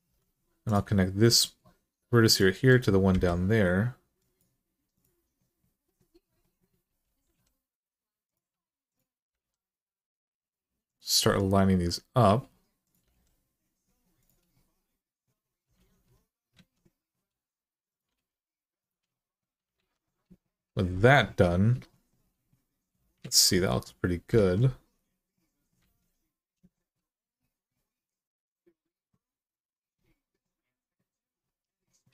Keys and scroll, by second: 2.9 m, 7.0 g, 9.1 g, 12.8 g, 15.6 alt+z, 16.3 alt+z, 17.9 g, 19.5 alt+z, 23.0 alt+z, 24.1 alt+z, 25.6 alt+z.